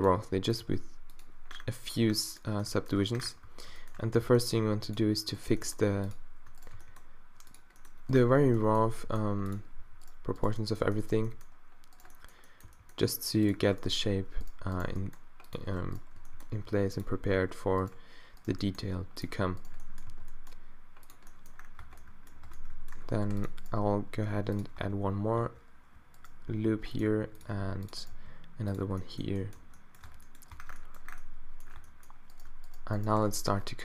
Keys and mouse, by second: 0.2 r, 0.7 g, 3.1 z, 4.2 g, 5.3-6.5 drag, 5.5 g, 6.8 g, 8.4 z, 8.9 g, 9.8 z, 11.2 g, 12.6 g, 14.4-15.5 middle drag, 14.9 g, 16.2 g, 18.2-19.2 drag, 18.5 g, 20.1-21.1 middle drag, 20.1 g, 21.8 Tab, 22.2 click, 22.5 Tab, 23.2 ctrl+r, 23.8 g, 24.8 Tab, 25.4 Tab, 26.8 g, 27.1 r, 27.6 ctrl+r, 28.1 g, 29.6 Tab, 30.1 Tab, 30.6 Tab, 31.8 Tab, 33.2 f.